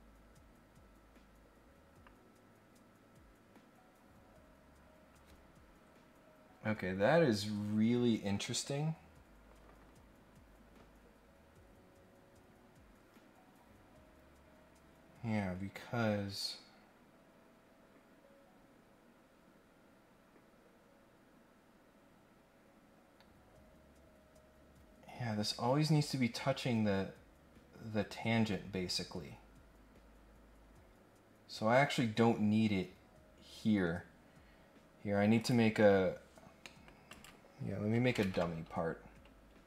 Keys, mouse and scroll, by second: 35.3 click, 36.6 middle click, 37.1 click, 39.1 scroll up 1, 39.3 scroll down 1, 39.5 scroll up 1.